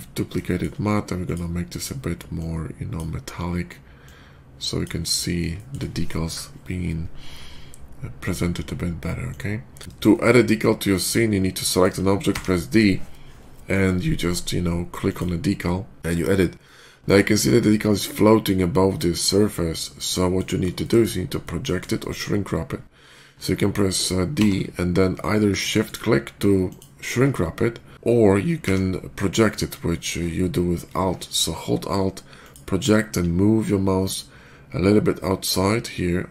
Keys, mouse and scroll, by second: 0.3 shift+middle click, 1.1 shift+click, 2.2 shift+click, 3.9-4.7 drag, 5.1-5.5 shift+middle drag, 8.1 shift+click, 9.1-9.6 drag, 10.0 shift+middle click, 10.8 shift+click, 11.5 shift+middle click, 12.1 d, 14.9 click, 15.9 middle click, 16.5-17.2 middle drag, 17.7-20.2 middle drag, 20.4 middle click, 20.6 shift+middle drag, 21.0 shift+middle click, 21.2-21.6 shift+middle drag, 21.8 shift+middle drag, 24.2 d, 26.5 shift+click, 27.8 ctrl+z, 28.5 d, 32.3 alt+click.